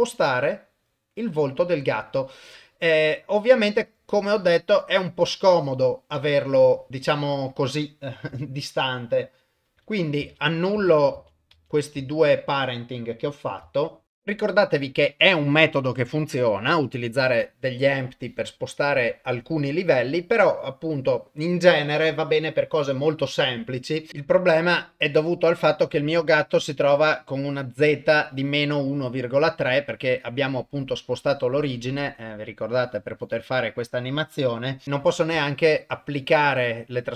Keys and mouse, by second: 10.2 ctrl+z, 10.8 ctrl+z, 11.2 ctrl+z, 11.6 ctrl+z, 12.0 ctrl+z, 16.9 click, 24.2 click, 24.6 click, 25.8 click, 27.6-34.6 drag, 35.3 ctrl+a.